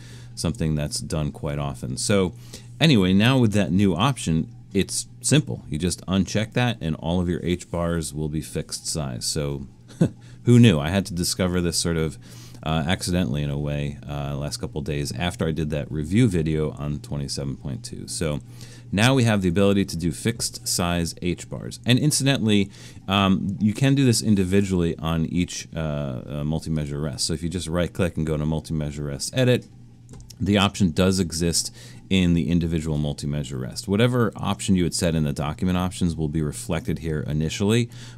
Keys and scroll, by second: 0.0 super+-, 3.7 alt+super+a.